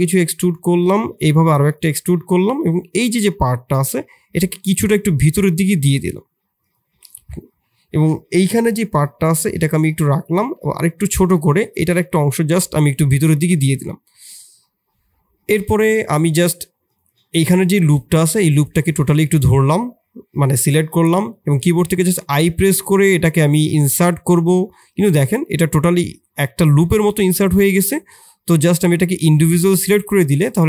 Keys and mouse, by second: 0.0 i, 1.0 i, 3.2 shift+click, 4.5 e, 7.2 middle click, 8.6 i, 10.4 i, 11.3 click, 11.7 e, 14.4 click, 15.6 shift+click, 16.1 3, 16.8 click, 17.0 click, 17.7 middle click, 18.8 shift+middle click, 19.2 middle click, 21.8 i, 25.5-26.7 middle drag, 29.6-30.6 middle drag.